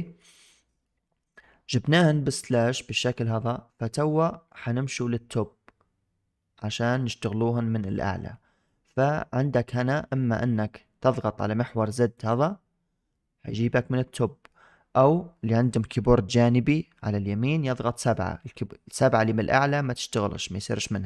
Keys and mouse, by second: 0.7-1.1 middle drag, 2.4-3.6 middle drag, 12.2-14.4 drag, 14.4-14.8 middle drag, 17.5 KP_7, 18.2 KP_7, 20.2 7.